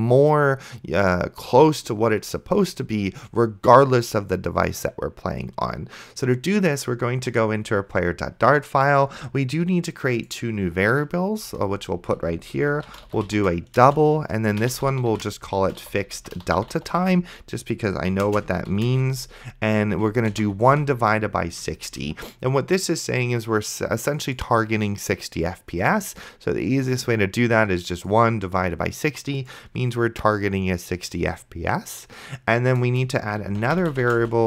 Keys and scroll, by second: 11.7 Return, 12.5-20.7 typing, 22.1 ctrl+s, 33.1 Return, 33.3-34.4 typing.